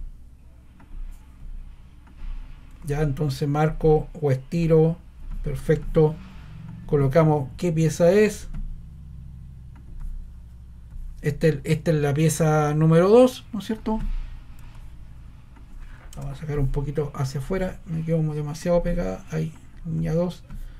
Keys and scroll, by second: 16.1 BackSpace.